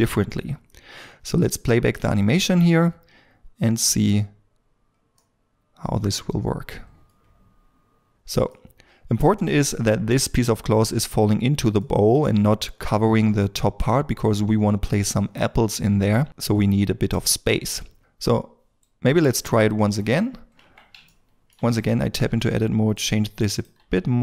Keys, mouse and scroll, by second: 2.9-3.3 scroll up 1, 3.3 middle click, 8.5 middle click, 16.3 middle click, 20.3 scroll down 1, 21.1 shift+middle click, 22.1 g, 23.7 g.